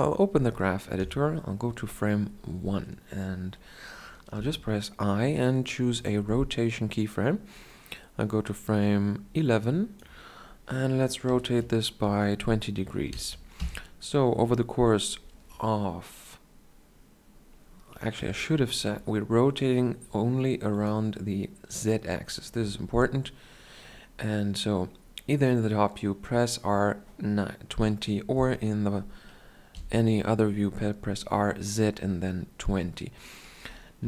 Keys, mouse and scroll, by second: 0.8 Right, 4.2 i, 8.5-11.1 drag, 11.1 r, 18.0 KP_7, 21.2-29.6 drag, 29.6 KP_1, 33.8 i.